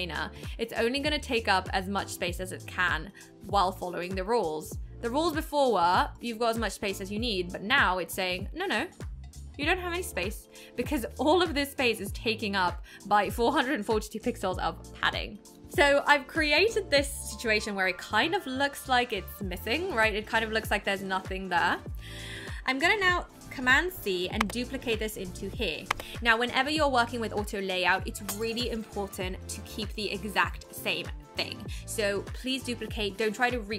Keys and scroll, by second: 24.4 super+c, 25.9 super+v.